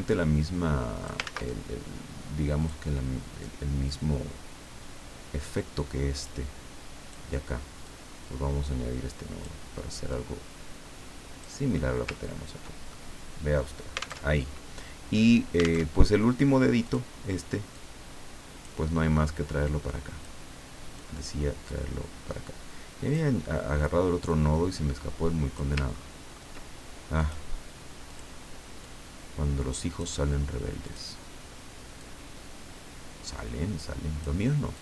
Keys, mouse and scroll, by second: 1.2 ctrl+click, 1.2 ctrl+z, 2.6 click, 6.2-7.3 drag, 7.8-9.6 drag, 10.1-11.8 drag, 12.2-12.8 ctrl+scroll down 1, 12.9 ctrl+middle click, 13.1 click, 14.2 alt+Tab, 15.8 alt+Tab, 16.8 click, 17.7-18.9 drag, 19.7 click, 21.0-23.6 drag, 24.3-25.8 drag, 26.0-26.7 ctrl+scroll up 4, 27.2 click, 28.1 click, 28.8 click, 30.9 click, 32.0-34.4 drag, 34.7-34.8 drag.